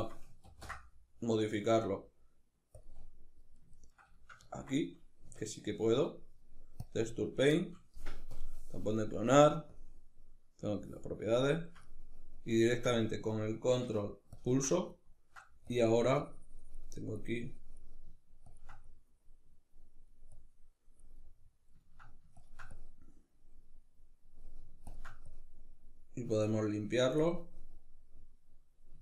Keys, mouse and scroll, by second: 2.4 z, 2.8-7.7 middle drag, 6.2 Tab, 7.7 click, 10.7-13.7 ctrl+middle drag, 13.7-14.3 ctrl+drag, 14.3-15.0 ctrl+middle drag, 15.0-20.6 drag, 20.6-21.8 middle drag, 21.8-24.4 ctrl+drag, 24.7-26.8 drag, 26.8-29.0 middle drag.